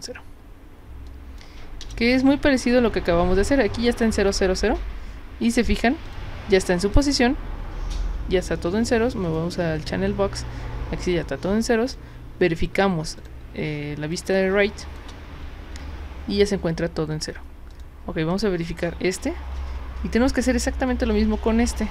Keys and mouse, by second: 1.1 click, 2.1 Tab, 6.1 click, 6.9 click, 9.3 click, 9.8 click, 11.9 click, 13.2 click, 13.5 space, 14.1-15.0 drag, 17.7 click, 18.3 click.